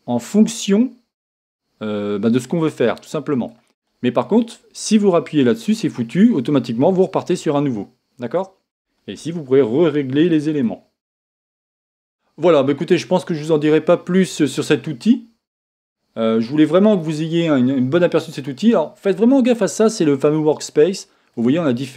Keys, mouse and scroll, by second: 5.8-8.4 drag, 10.4-21.9 drag.